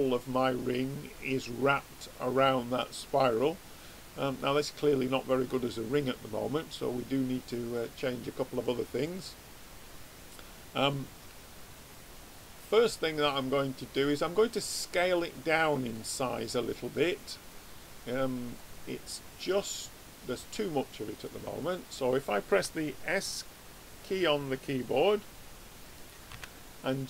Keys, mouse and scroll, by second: 9.9-12.7 middle drag, 17.9 click, 18.6-23.2 middle drag, 26.4 s.